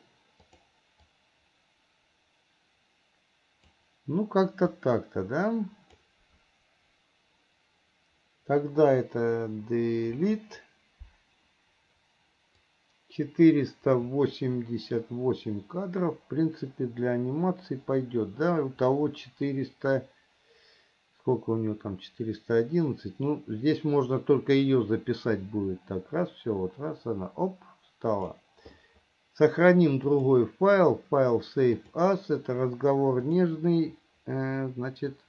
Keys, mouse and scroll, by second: 0.7 click, 1.3-4.0 drag, 4.9-6.2 drag, 12.9-28.6 drag, 30.2-32.3 drag.